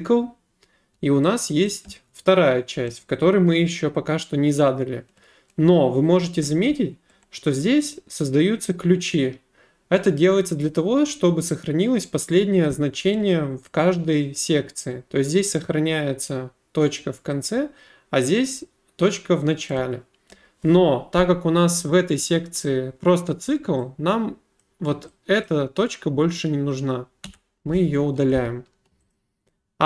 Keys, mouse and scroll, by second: 1.7 click, 15.6 click, 24.6 click, 25.4 click, 27.3 Delete, 29.1 click.